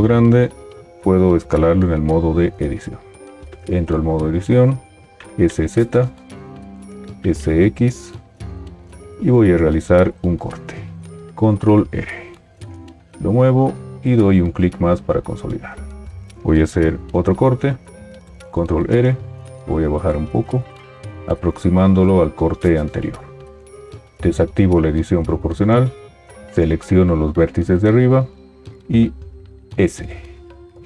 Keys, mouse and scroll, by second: 3.5 Tab, 5.2 s, 7.1 s, 11.3 ctrl+r, 18.5 ctrl+r, 29.6 s.